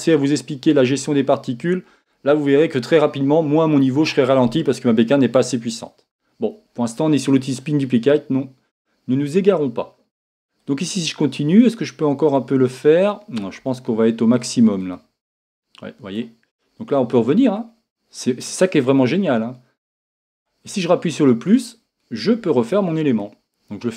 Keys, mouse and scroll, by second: 13.5 click, 14.9-16.6 drag, 17.9-20.4 drag, 21.5-23.9 drag.